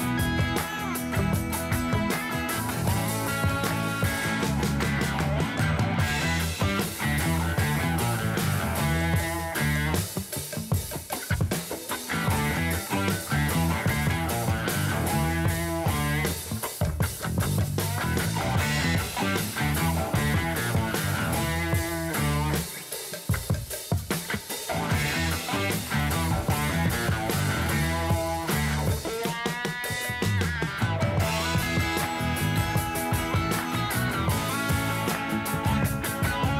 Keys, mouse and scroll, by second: 2.0 click, 5.5 click, 6.6 middle click, 7.1 scroll up 5, 7.8-9.1 shift+middle drag, 9.1-9.6 scroll down 1, 9.6 click, 11.4 click, 13.3 Tab, 14.3 p, 15.9 Tab, 16.4 click, 18.3-21.3 drag, 22.6 click, 23.4-25.3 drag, 26.0-28.0 drag, 28.6-31.6 drag, 32.5 click, 33.7 click, 35.4 click, 36.2-36.5 drag.